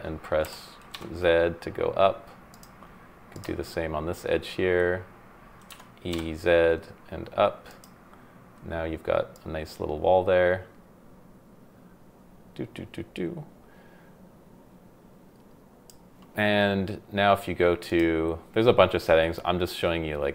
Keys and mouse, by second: 0.4 y, 0.9 z, 2.5 click, 5.7 e, 6.1 z, 7.7 click, 9.3-15.9 drag, 17.9 click.